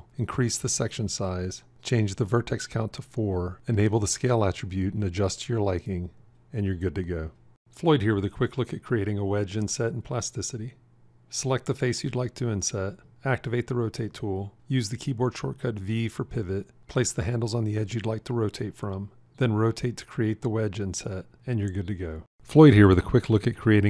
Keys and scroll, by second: 13.9 r, 15.9 v.